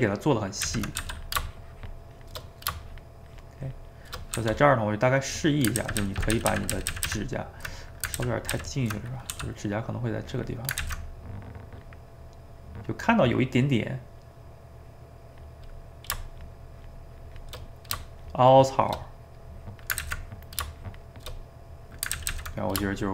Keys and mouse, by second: 0.6 ctrl+z, 1.0 f, 1.5 shift+click, 2.5 middle click, 2.8-4.4 shift+drag, 4.4 f, 4.8 middle click, 5.3 click, 5.8-7.1 ctrl+z, 7.8 middle click, 8.2 ctrl+z, 8.6 ctrl+z, 9.0 middle click, 9.3 f, 9.8 middle click, 10.3 click, 10.8 ctrl+z, 11.1-13.6 drag, 13.6 middle click, 14.1-15.7 drag, 15.7 middle click, 16.4-17.7 shift+drag, 17.7 middle click, 18.2 shift+click, 19.1 middle click, 19.6 click, 20.0 ctrl+z, 20.3-21.4 drag, 21.4 middle click, 22.2 ctrl+z, 22.3 ctrl+z, 22.5 middle click, 23.0 shift+click.